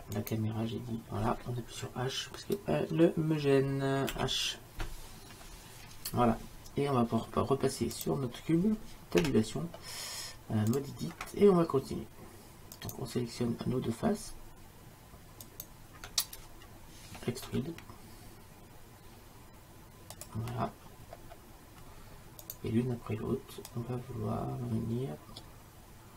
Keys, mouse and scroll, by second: 4.2 h, 8.0-10.9 right drag, 9.3 Tab, 12.9-17.5 right drag, 17.5 e, 22.5-23.8 drag, 24.6-26.1 drag.